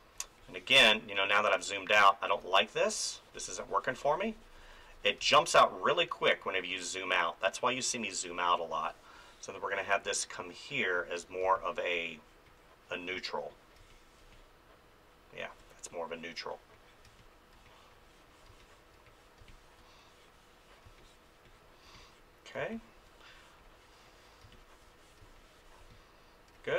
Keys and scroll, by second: 5.2 space, 11.4 space, 13.8 space, 17.0 space, 22.6 space, 24.4 space.